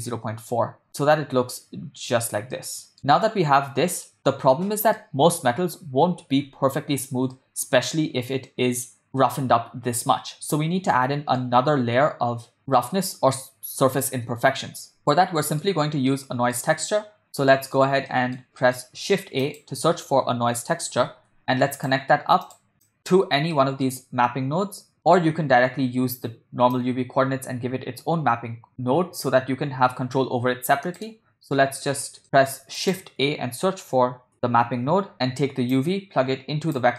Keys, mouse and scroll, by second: 0.9-2.3 middle drag, 2.7-4.1 middle drag, 5.1-5.8 middle drag, 7.4-9.1 middle drag, 11.1-11.5 middle drag, 13.4-14.2 shift+middle drag, 15.2-15.7 ctrl+middle drag, 16.1 middle click, 16.9 ctrl+middle click, 17.5 middle click, 18.1 ctrl+middle click, 18.6 middle click, 19.1 shift+a, 22.9 click, 23.6 middle click, 26.8 middle click, 26.8 click, 27.6 click, 32.2 middle click, 32.8 shift+a, 35.3 p, 35.8-36.8 drag.